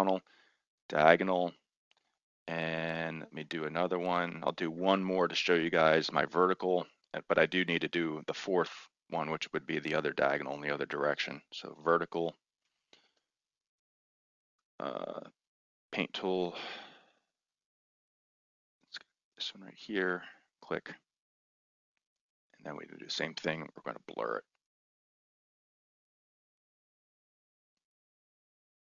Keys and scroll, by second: 11.5-13.2 typing.